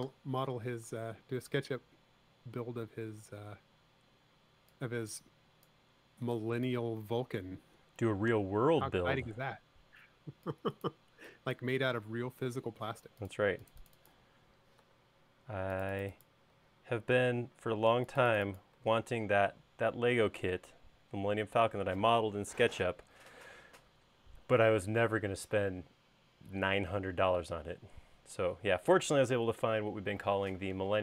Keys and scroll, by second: 12.8 space, 15.2 BackSpace, 16.9 BackSpace, 19.1 BackSpace.